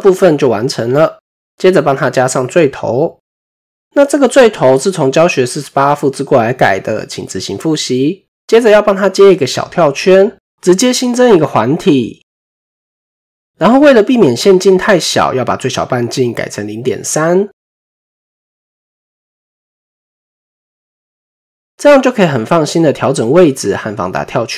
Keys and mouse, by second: 3.3 click, 4.0 shift+middle click, 5.9 shift+middle click, 8.1 click, 8.1 typing, 9.9 shift+a, 17.4-20.3 drag, 21.5-23.1 drag.